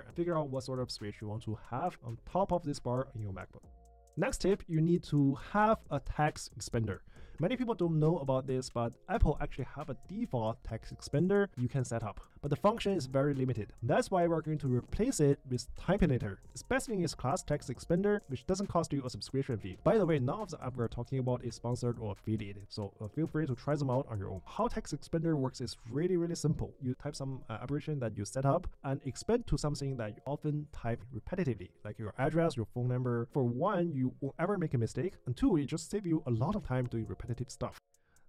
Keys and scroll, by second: 29.7 Return, 31.3 Return, 33.4 Return.